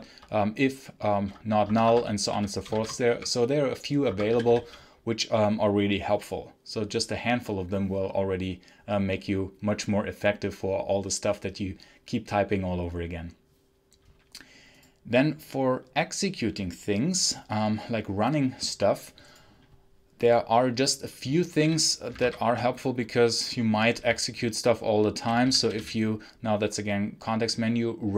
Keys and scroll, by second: 1.5 Escape, 1.6-3.1 typing, 3.9 Escape, 4.2 d, 4.5 k, 21.5 w, 22.1 Menu, 24.2 Down, 25.3 Down.